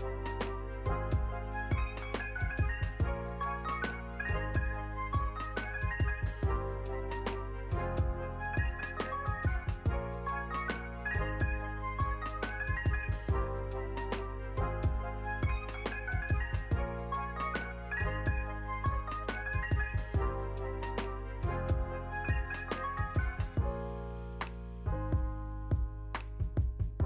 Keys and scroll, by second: 0.0 p, 1.2 ctrl+v, 3.5 Escape, 5.5 ctrl+v, 6.6 space, 11.2 space, 11.5 ctrl+s, 16.1 space, 23.1 space.